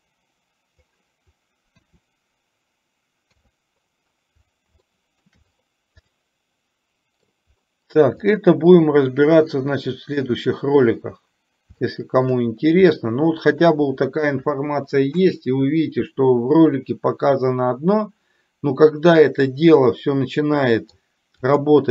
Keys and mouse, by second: 5.0 shift+middle click, 6.2-7.4 middle drag, 8.4 click, 10.3 click, 11.9-12.3 shift+middle drag, 13.0 middle click, 19.9-21.0 middle drag, 21.7 click.